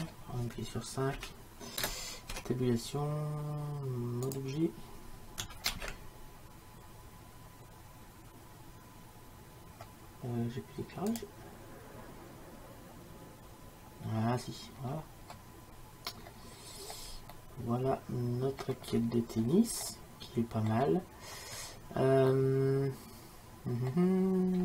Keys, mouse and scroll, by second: 1.2 KP_5, 2.4 Tab, 8.0 shift+z, 11.2-13.2 drag, 14.8-17.4 middle drag, 24.3-24.6 middle drag.